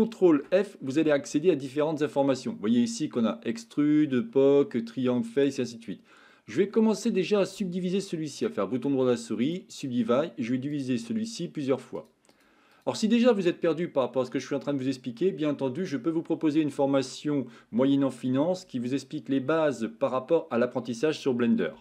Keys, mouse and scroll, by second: 0.5 ctrl+p, 8.5-9.6 right drag, 10.7 click, 12.0 click, 12.3 click, 13.5-15.2 middle drag.